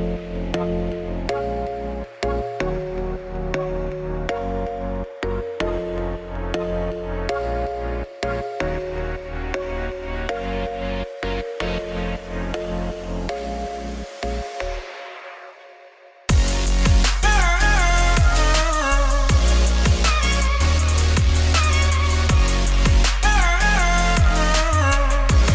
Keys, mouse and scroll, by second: 1.1 Tab, 1.2 s, 2.1 Tab, 2.3 g, 3.9-6.7 drag, 6.7 Tab, 6.9 s, 7.8 Tab, 8.0 g, 9.2 middle click, 9.7 g, 10.8-12.1 middle drag, 13.1 click, 13.5 s, 14.5-15.7 middle drag, 16.1 click, 16.3 scroll down 2, 16.7 click, 17.6 click, 17.9 middle click, 18.4 shift+click, 18.6-19.7 middle drag, 19.7 m, 21.3-22.5 middle drag, 22.9 click, 23.2-24.4 middle drag, 24.9-25.5 drag.